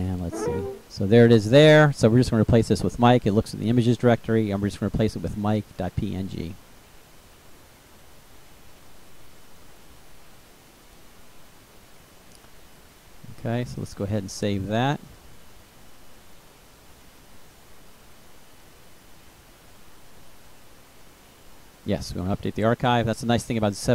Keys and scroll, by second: 5.4-6.5 typing, 6.9 Delete.